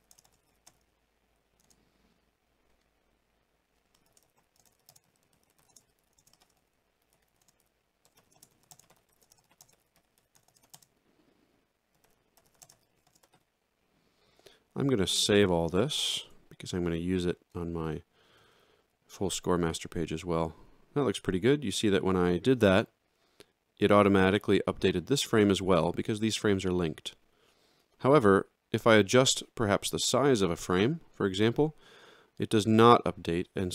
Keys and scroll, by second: 0.0-0.4 typing, 1.6 space, 4.1-10.5 typing, 12.7 space, 12.7 f, 13.1 space, 13.2 i, 15.8 ctrl+a.